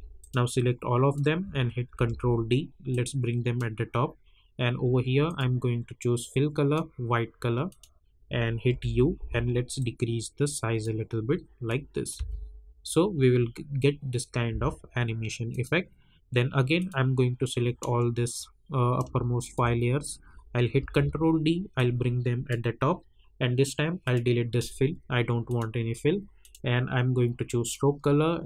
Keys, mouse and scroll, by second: 0.2-1.9 drag, 1.9 ctrl+d, 2.9-5.2 drag, 6.3 -, 7.6 click, 8.7 u, 9.7-12.1 drag, 12.1 space, 14.5 space, 15.5 click, 17.2 scroll down 1, 18.4 scroll up 1, 19.4 shift+click, 20.7 ctrl+d, 21.7-24.0 drag.